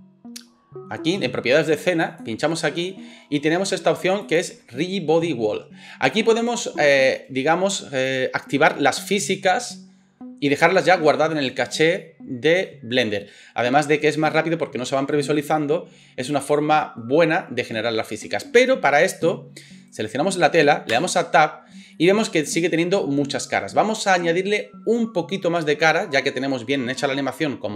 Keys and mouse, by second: 2.1 click, 2.2-4.2 middle drag, 4.2-27.7 drag, 19.9 middle click, 19.9 right click, 20.9 Tab.